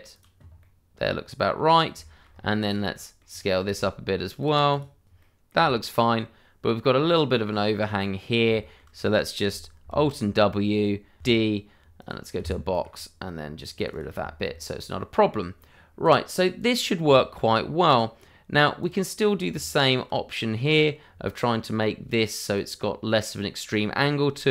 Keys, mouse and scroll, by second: 0.1 click, 0.3 scroll down 1, 0.6 middle click, 1.7 scroll down 1, 2.0 shift+middle click, 2.3 scroll up 1, 2.4 click, 2.8 a, 3.2 click, 3.3 double click, 3.7 s, 5.8 click, 5.9 middle click, 7.0 click, 8.6 shift+middle click, 11.2 d, 11.9 click, 12.4 Escape, 12.7 click, 14.0 double click, 14.5 shift+middle click, 15.4 scroll down 1, 16.0 click, 17.4 shift+middle click, 18.2 scroll up 1, 18.8 click, 19.5 Tab, 20.7 click, 24.4 g.